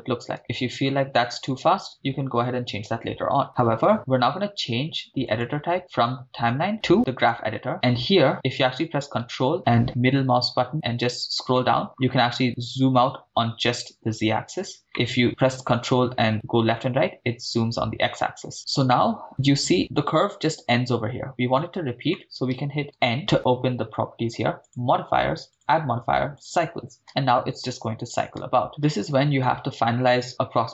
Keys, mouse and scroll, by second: 7.3 click, 7.7 scroll down 4, 8.3 scroll down 2, 8.3 middle click, 9.5-11.6 ctrl+middle drag, 11.8-12.4 scroll up 6, 12.4-14.6 ctrl+middle drag, 14.9-18.5 ctrl+middle drag, 18.5-18.9 scroll up 2, 18.9 middle click, 19.8 scroll up 1, 22.2 middle click, 22.9 n, 24.6 click, 25.5-27.6 drag, 28.2 click, 28.4 shift+space, 30.1-30.7 middle drag.